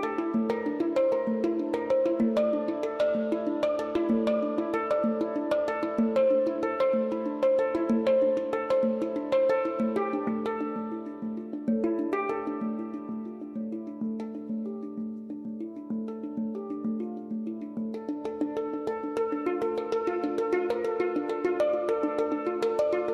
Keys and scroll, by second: 1.8 ctrl+z, 3.7 F2, 12.6 ctrl+z, 12.9 ctrl+z, 13.7 F3, 14.8 ], 15.9 F2.